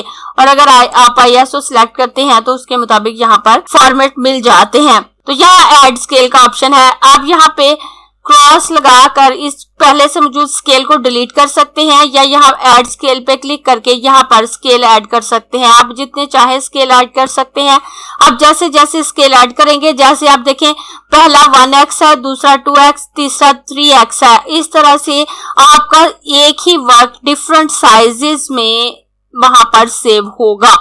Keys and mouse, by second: 0.3 click, 5.1 click, 8.6 click, 12.6 click, 15.6 click.